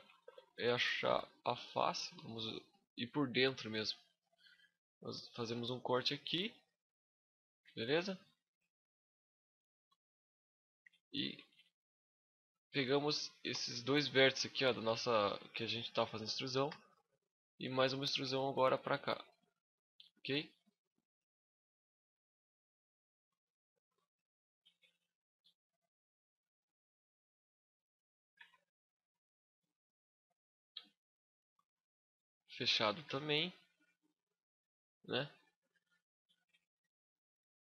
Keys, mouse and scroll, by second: 0.0 shift+middle click, 0.4 scroll up 1, 0.5 middle click, 1.1 middle click, 1.5 shift+middle click, 2.0 middle click, 2.9 shift+middle click, 3.8 ctrl+r, 6.4 click, 6.6 middle click, 7.4 z, 7.5 scroll up 1, 7.6 middle click, 8.8 alt+right click, 9.4 shift+middle click, 10.1 alt+right click, 10.9 b, 11.9 middle click, 12.3 z, 12.5 middle click, 12.5 scroll up 1, 13.0 shift+middle click, 13.3 z, 13.5 middle click, 14.0 scroll down 2, 14.2 shift+middle click, 14.7 middle click, 14.7 scroll up 1, 16.4 e, 16.7 right click, 17.2 click, 17.8 z, 18.2 middle click, 19.0 click, 20.4 click, 22.2 click, 23.2 shift+middle click, 23.7 z, 25.1 click, 26.2 middle click, 28.1 z, 28.7 right click, 29.1 z, 29.7 click, 30.5 Tab, 30.7-31.1 scroll down 5, 31.0 middle click, 32.8 z, 33.2-33.5 scroll up 5, 33.3 middle click, 35.8 middle click, 36.4 z, 36.8 scroll down 1, 37.0 middle click.